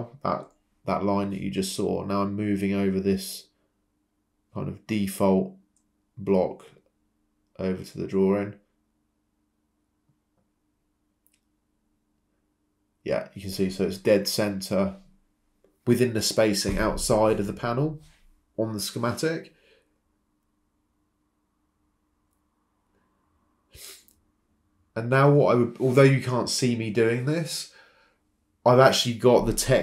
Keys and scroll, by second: 2.8 m, 3.2 Return, 18.7 m, 19.9 Escape, 20.3 Escape, 23.8 h, 24.9 Caps_Lock, 25.1-26.5 typing, 27.8-28.5 typing.